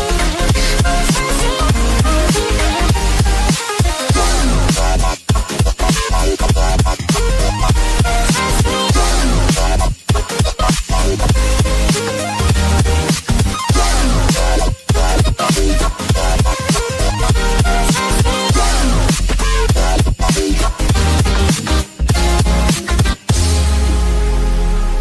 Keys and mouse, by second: 5.8 click, 9.9 click, 11.3 click, 13.0 click, 13.6 click, 13.9 click, 16.5 click, 17.0 click, 17.8 click, 19.5 click, 23.4 click, 24.8 click.